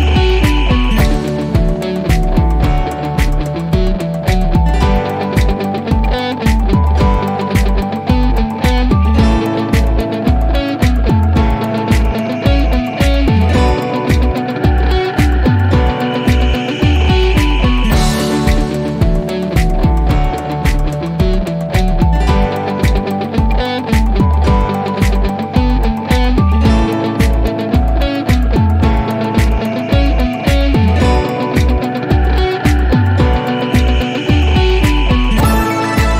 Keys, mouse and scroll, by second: 1.6 F3, 21.0 F3, 27.8 click, 30.1 click, 32.5-34.0 scroll down 1, 34.1 click.